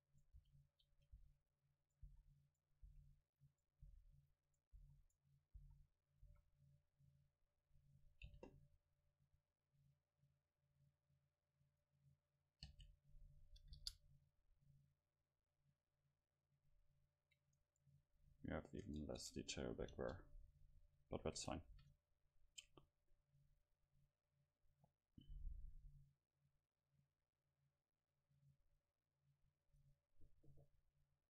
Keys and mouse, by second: 0.4 r, 1.2 s, 2.1 click, 2.1 right click, 2.9 s, 3.6 right click, 3.9 s, 5.6 s, 6.2 right click, 6.3 a, 6.8-8.3 drag, 8.3 c, 11.9-13.8 right drag, 12.7 space, 15.3-17.8 drag, 18.3 Tab, 18.9 Tab, 19.3 Tab, 20.0 KP_0, 21.2 a, 21.8 ctrl+s, 29.7-31.2 right drag.